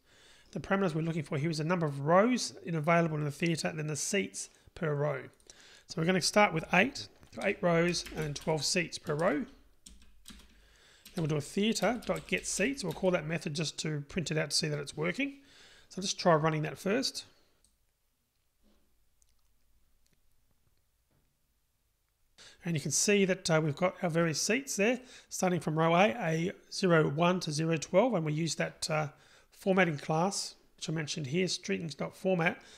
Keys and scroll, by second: 11.9 Return, 18.1 ctrl+r.